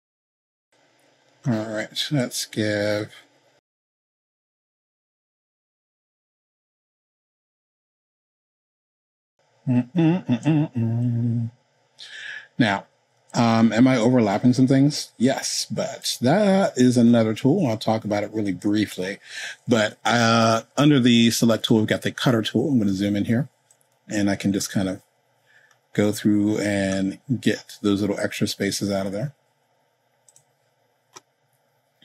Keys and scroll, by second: 7.7 super+z.